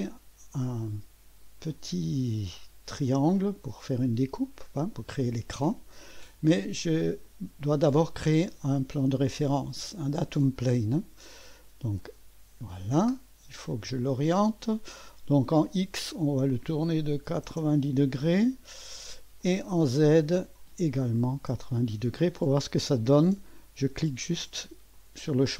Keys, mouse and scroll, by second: 0.1-0.7 scroll up 1, 0.9 middle click, 1.8 typing, 2.3 click, 3.0 click, 5.3-6.0 scroll up 1, 7.2 click, 7.5 typing, 8.0 click, 12.0 click, 16.0 click, 17.1-18.0 typing, 19.4-21.3 drag, 21.1-22.0 typing, 24.9 click.